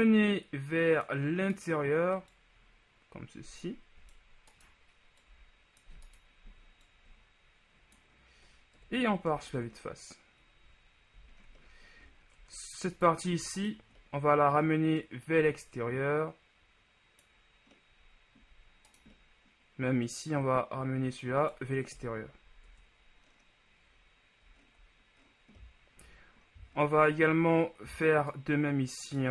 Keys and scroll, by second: 8.9 KP_1, 9.5 Tab, 12.5 Tab, 22.2 KP_1, 22.7 Tab, 27.1 Tab.